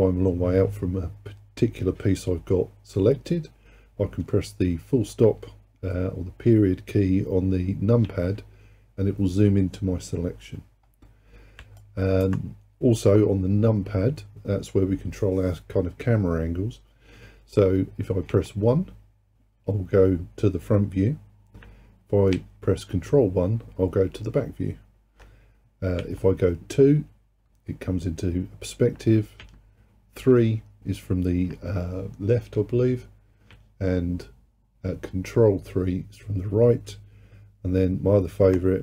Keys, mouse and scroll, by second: 8.1 KP_Decimal, 10.9-11.8 scroll down 5, 11.8 alt+click, 18.3 KP_1, 22.4 ctrl+KP_1, 26.0 KP_2, 29.5 KP_3, 33.5 ctrl+KP_3.